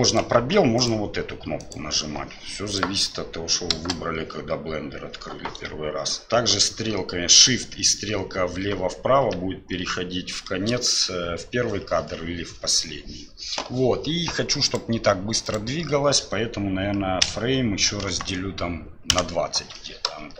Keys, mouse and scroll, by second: 0.0 click, 0.7 click, 1.6 click, 3.7 space, 8.7 shift+Left, 9.2 shift+Right, 9.8 shift+Left, 14.7-19.6 drag, 20.2 space.